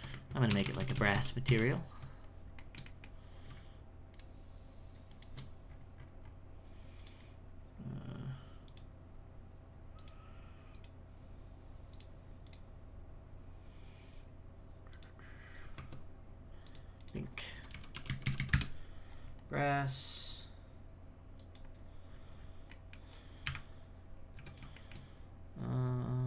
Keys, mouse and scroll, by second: 0.5 ctrl+KP_Add, 0.6 ctrl+KP_Add, 2.6 shift+middle click, 3.2-4.1 scroll up 1, 4.1 alt+shift+right click, 5.1 alt+shift+right click, 5.7-6.9 scroll up 10, 6.9 click, 8.6-15.7 drag, 15.7 Tab, 16.6-18.3 drag, 18.3 s, 20.1 click, 22.1-22.7 scroll down 6, 22.7 middle click, 23.5 KP_1, 24.4 z, 24.7 shift+middle click, 25.1-26.1 scroll down 1, 26.1-26.2 scroll up 1.